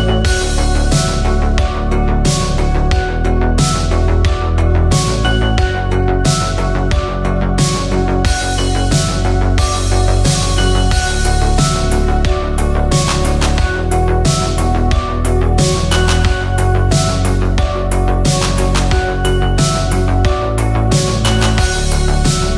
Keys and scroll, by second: 5.3 ctrl+g, 6.8-7.7 typing, 12.9 v, 20.6 ctrl+t.